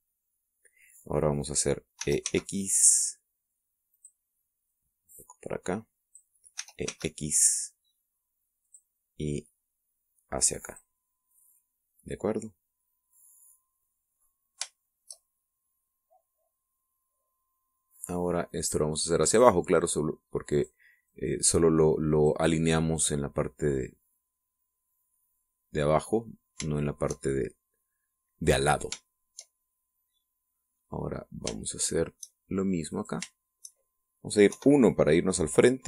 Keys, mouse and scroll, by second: 2.8 click, 2.8 e, 4.8 click, 5.5-7.2 drag, 7.4 e, 7.7 x, 9.5 click, 10.3-11.8 drag, 12.1 scroll down 1, 12.3-15.2 middle drag, 15.6 shift+middle click, 16.4-18.8 middle drag, 19.3-20.4 drag, 21.4 click, 21.9-23.3 drag, 23.4 scroll down 1, 24.4-27.6 middle drag, 27.8 shift+middle click, 28.2-28.5 shift+scroll down 1, 29.3 scroll down 2, 29.9 shift+middle click, 30.4-31.8 shift+middle drag, 31.9-32.6 scroll up 1, 32.6 shift+middle click, 33.8-35.0 shift+right drag, 35.3 KP_1.